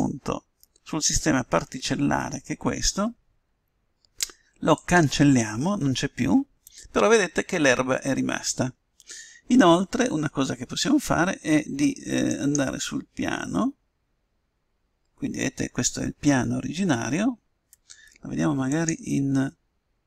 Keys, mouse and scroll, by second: 0.7-2.4 drag, 5.9-7.6 drag, 19.7-20.0 drag.